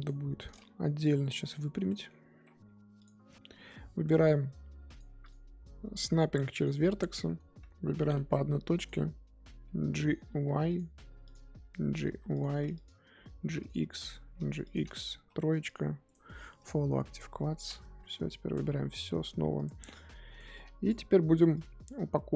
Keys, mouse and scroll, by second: 0.7 Tab, 1.0 click, 1.4 Tab, 3.0 click, 4.8 click, 10.2 g, 11.3 click, 12.0 g, 12.8 click, 13.3 g, 14.0 click, 14.3 g, 15.7 click, 16.6-18.1 right drag, 18.1 Tab, 18.5 click, 18.7 Tab, 19.1 a, 19.6 click, 20.8 click.